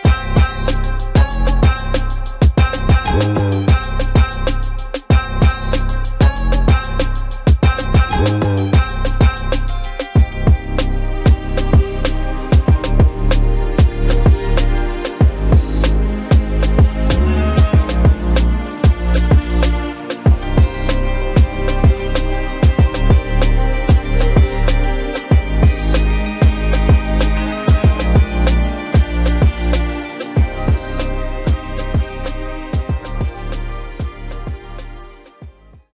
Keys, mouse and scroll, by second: 2.1-6.1 drag, 8.2 click, 8.8-10.7 drag, 11.8 click, 15.6 click, 17.2 r, 26.7-29.1 middle drag.